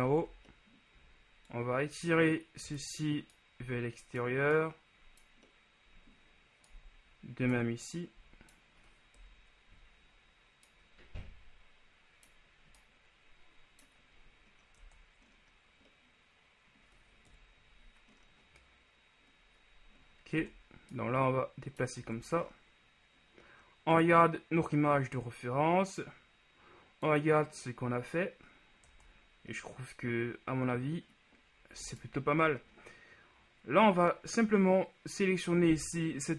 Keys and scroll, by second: 0.2 ctrl+z, 9.4 KP_1, 15.0 Tab, 17.4 KP_1, 20.5 Tab, 29.2 Tab.